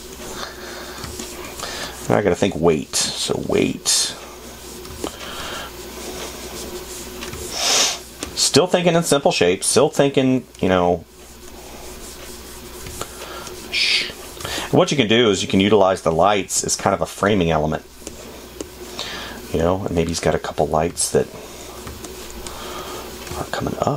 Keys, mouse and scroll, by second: 10.2 space, 21.4 space.